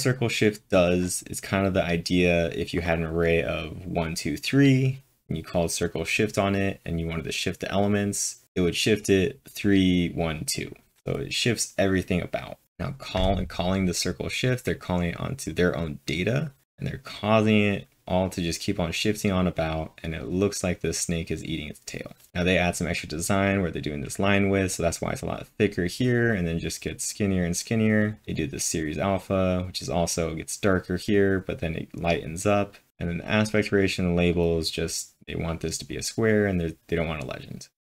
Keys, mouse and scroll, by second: 0.9-1.7 typing, 12.7-13.5 typing, 13.0-22.3 drag, 23.2-23.9 typing, 23.4-28.0 drag, 26.9-27.6 typing, 28.0 click, 28.3-31.1 drag, 32.6-33.4 typing, 32.9 click, 33.2-36.8 drag, 37.8 click.